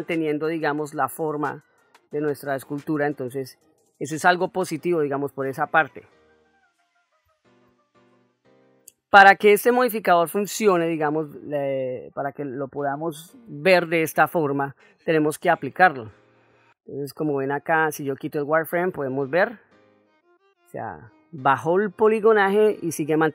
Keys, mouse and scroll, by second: 17.5-19.2 drag, 19.6 middle click, 20.9-23.3 ctrl+middle drag.